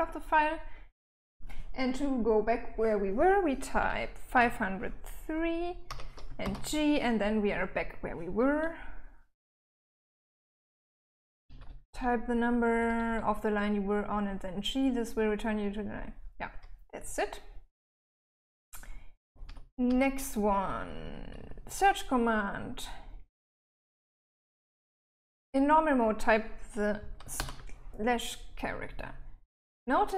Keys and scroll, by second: 3.3-4.1 typing, 5.1-5.6 typing, 8.6-12.4 typing, 15.8-21.1 typing, 26.6 /.